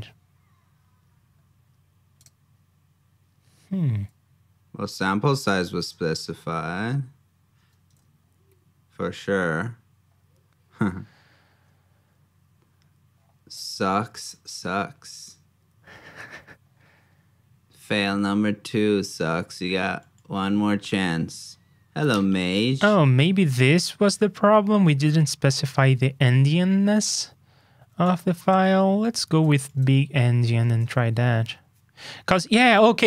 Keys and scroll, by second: 7.9 super+Tab, 29.4 super+c, 29.7 super+Tab.